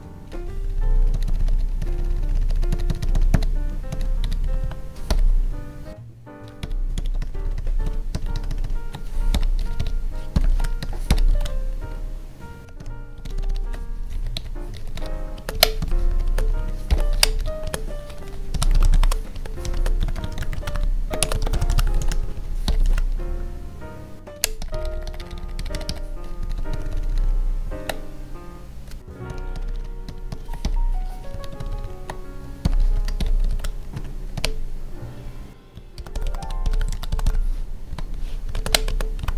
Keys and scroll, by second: 4.4 Tab, 6.6 Up, 7.2 ctrl+Right, 7.8 Right, 8.3 ctrl+shift+Right, 9.3 Delete, 9.6 Left, 10.4 ctrl+s, 10.8 Right, 11.3 ctrl+s, 11.8 Right, 12.6 Down, 13.2 ctrl+shift+Left, 14.8 Up, 15.3 space, 15.5 Left, 16.0 Left, 16.2 space, 16.3 Right, 17.1 Left, 17.6 space, 19.3 space, 19.7 space, 21.2 space, 21.9 ctrl+s, 22.2 Right, 22.8 ctrl+s, 24.3 Down, 26.4 Down, 29.3 Down, 29.5 ctrl+shift+Left, 31.3 Up, 31.6 ctrl+Right, 32.9 Right, 33.5 ctrl+s, 33.9 Right, 34.3 Down, 35.5 ctrl+s, 37.9 Tab, 38.4 Left, 38.5 space, 38.6 Left, 38.9 space.